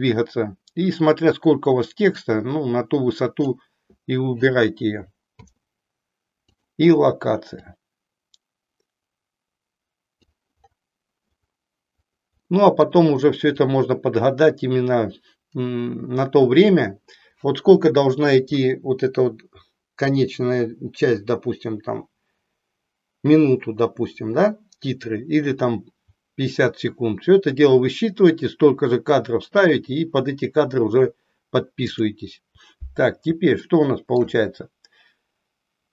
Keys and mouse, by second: 7.4 click.